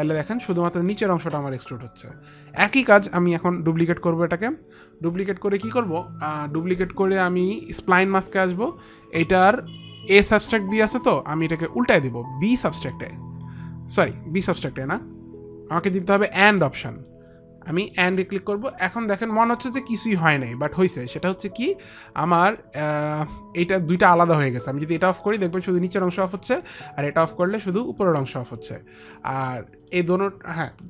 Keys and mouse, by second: 0.8 alt+click, 3.7 ctrl+click, 8.2 click, 11.3 click, 13.0 click, 15.9 F9, 17.4 click, 18.3 F9, 18.3 click, 20.1 alt+F9, 20.1 alt+click, 25.4 click, 26.4 click, 27.7 click, 28.4 click, 30.3 click.